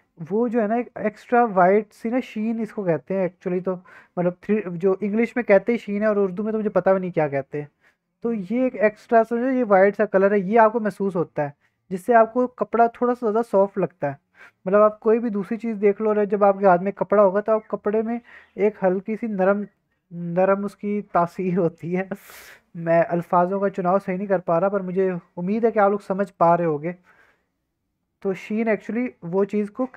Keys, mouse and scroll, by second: 1.7-4.1 drag, 1.7 middle click, 4.1-13.8 middle drag, 17.5 scroll down 1, 17.6-20.2 middle drag, 23.2-24.2 middle drag, 24.3 scroll down 1, 25.6 scroll up 1, 26.3 middle drag, 26.6-27.1 scroll up 2, 27.1-28.4 middle drag, 28.4 scroll down 1, 28.8-29.6 middle drag, 29.6-29.9 drag.